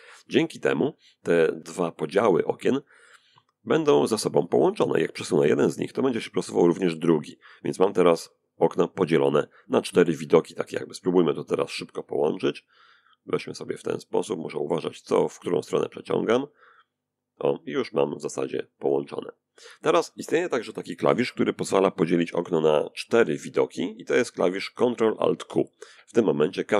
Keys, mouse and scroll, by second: 4.0-8.2 drag, 9.4 click, 11.1-12.8 drag, 13.6-14.6 drag, 15.1 click, 17.3-18.3 drag, 22.0 ctrl+alt+q, 25.2-26.6 middle drag.